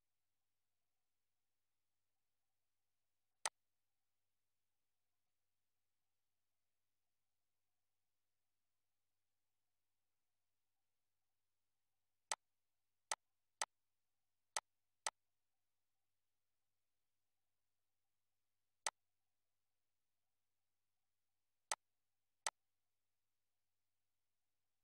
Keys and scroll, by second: 2.0 2, 4.6 Up, 16.6 BackSpace, 17.5 4.